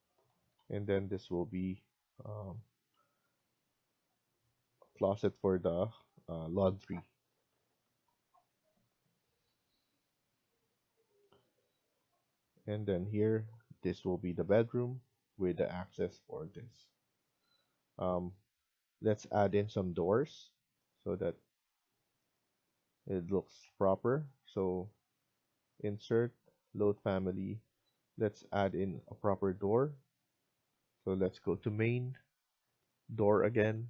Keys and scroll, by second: 0.3 Escape, 0.5 Escape, 23.1 Escape, 23.9 Escape.